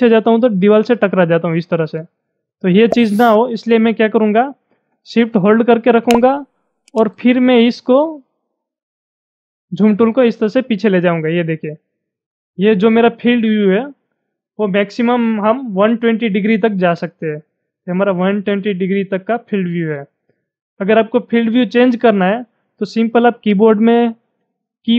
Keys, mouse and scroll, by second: 5.7-15.1 drag.